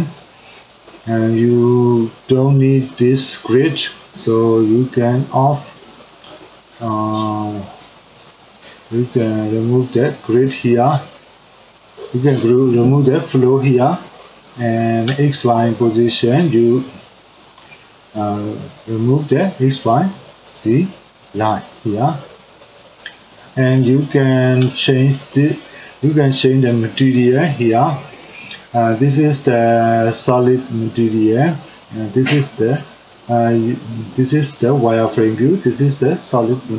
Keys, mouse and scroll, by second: 18.4-21.0 drag, 34.2-36.7 drag.